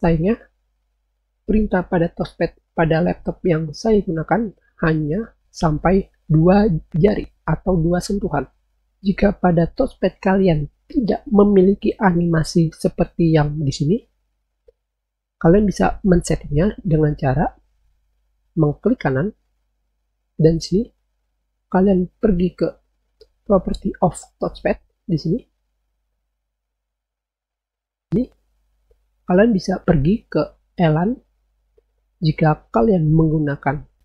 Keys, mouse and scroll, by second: 24.3 click, 31.0 click.